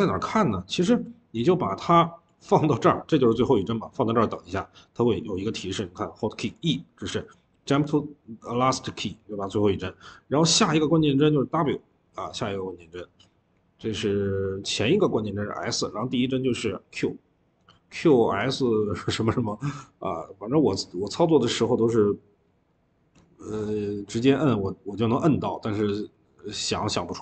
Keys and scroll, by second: 26.4 ctrl+z.